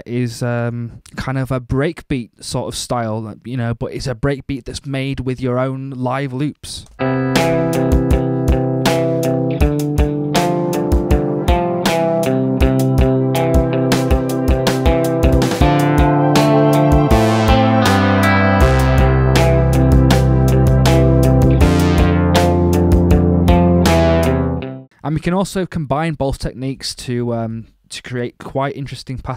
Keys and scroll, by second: 6.8 space, 26.7 alt+super+Up.